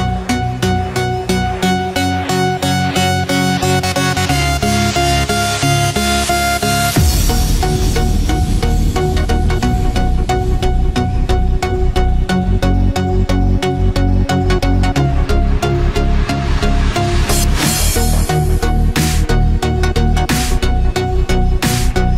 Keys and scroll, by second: 6.2 ctrl+0, 8.3 ctrl+=, 8.7 ctrl+space, 9.0 ctrl+=.